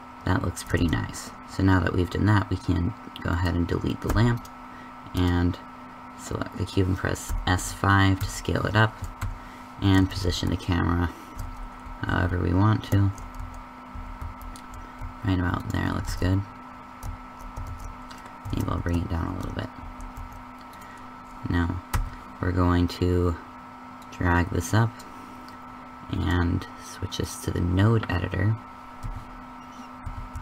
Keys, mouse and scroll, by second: 1.1 shift+z, 3.6 right click, 4.0 x, 7.2 s, 9.9 shift+f, 16.0 shift+z, 18.4 shift+f, 21.8 t, 23.9 click, 24.1 click, 24.4 click, 29.0 n, 30.0 n, 30.3 n.